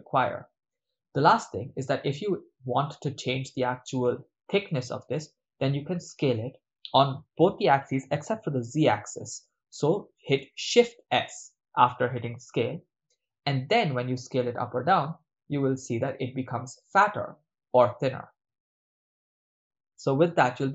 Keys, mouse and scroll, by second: 1.4 click, 1.4 right click, 8.1 s, 12.5 shift+z, 19.5 click, 20.4-20.7 middle drag.